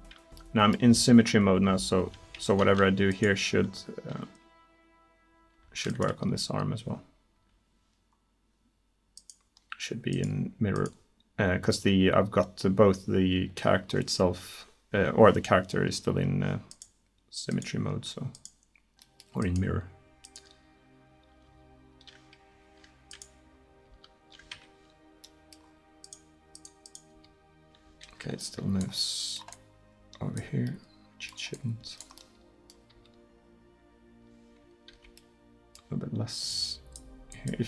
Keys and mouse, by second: 1.0 middle click, 1.8 r, 3.6 r, 6.3 r, 21.5 r, 23.9 r, 27.2 r, 29.4-30.6 middle drag, 30.8 middle click, 32.2 middle drag, 32.4 middle click, 32.7 drag, 33.0 right drag, 33.0 r, 36.5-37.6 middle drag.